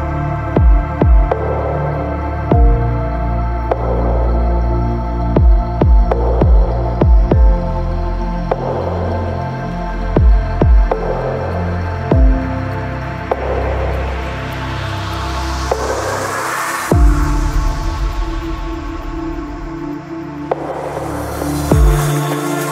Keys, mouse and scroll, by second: 0.6 click, 0.7 KP_0, 8.2 click, 9.6 click, 10.8 click, 11.8 click, 14.9-16.2 drag, 17.4 click, 18.0 ctrl+middle click, 18.4 click, 18.6 shift+click, 19.3 ctrl+click, 19.5 alt+z, 19.6 ctrl+click, 19.9 ctrl+click, 20.3 ctrl+click, 20.7 ctrl+click, 21.0 shift+middle click, 21.2 ctrl+click, 21.7 shift+click, 22.2 ctrl+click.